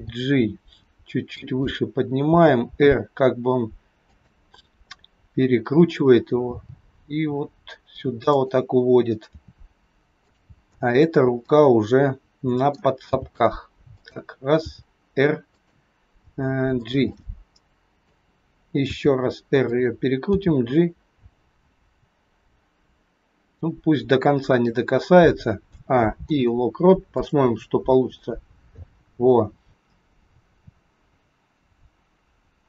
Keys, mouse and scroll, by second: 0.0 g, 2.3 r, 6.4 g, 9.2 r, 10.9 click, 11.4 middle click, 13.0 g, 14.6 r, 16.2 g, 17.0 middle click, 18.8 r, 20.3 g, 25.7 a, 26.2 i, 28.2 click.